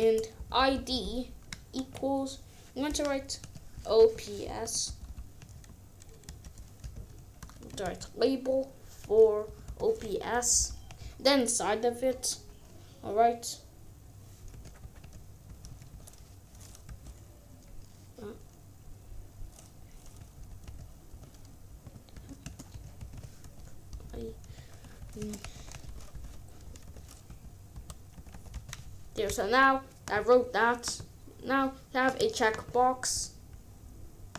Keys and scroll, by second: 0.3 Right, 1.7 ctrl+s, 3.4-4.6 typing, 4.8 Right, 6.2 Return, 6.5-8.0 typing, 9.1-10.5 typing, 14.7-16.8 typing, 20.4-28.5 typing, 29.1 ctrl+s.